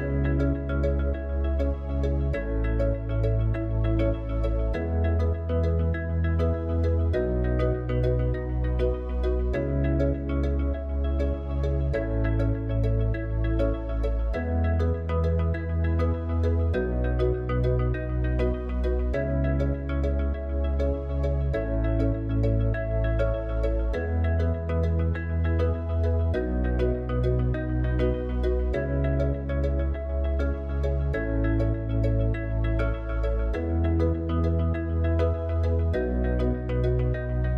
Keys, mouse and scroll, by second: 0.0-1.0 drag, 1.0-3.3 middle drag, 3.3 click, 5.1-9.1 middle drag, 9.1 Tab, 10.8 alt+click, 19.6-30.1 drag.